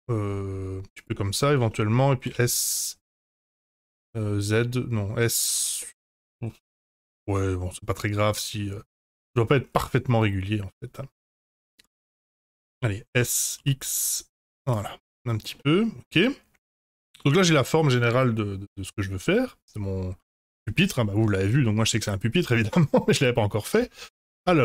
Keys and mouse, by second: 1.6 shift+middle click, 2.2 s, 3.2 s, 5.5 ctrl+z, 5.8-9.3 middle drag, 12.2 middle click, 13.1 s, 15.0 click, 15.6-20.5 middle drag, 22.0 middle click, 23.7 Tab, 24.0 2, 24.4 Tab.